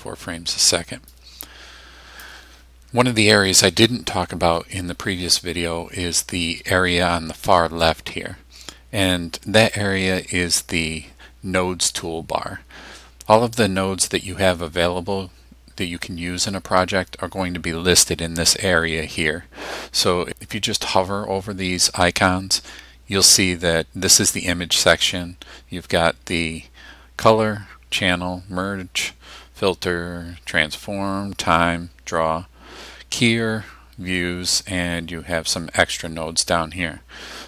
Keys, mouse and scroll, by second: 1.1-2.5 drag, 9.7 click.